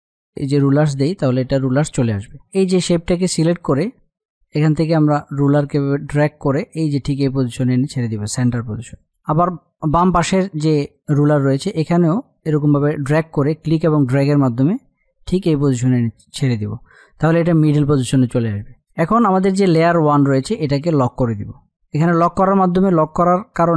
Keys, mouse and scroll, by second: 0.3 right click, 2.1 F8, 2.5 click, 6.1-11.1 drag, 11.9-18.7 drag, 19.4 click, 21.8 click.